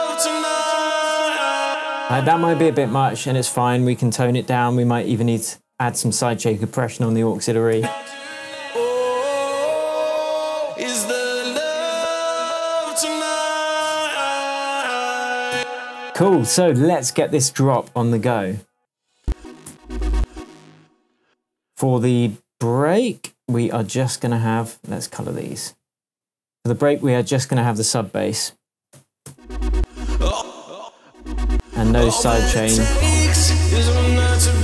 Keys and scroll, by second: 1.6 space, 5.4 super+c, 7.0 super+v, 7.8 super+space, 15.5 space, 16.0 Tab, 18.7 space, 28.9 BackSpace, 29.2 space, 31.0 space, 32.5 BackSpace.